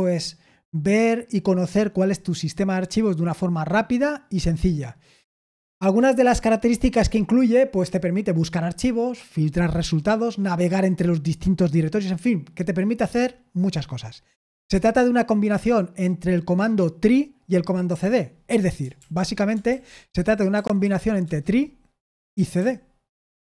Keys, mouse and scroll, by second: 19.0 super+l, 19.7 super+l, 20.8-23.0 typing.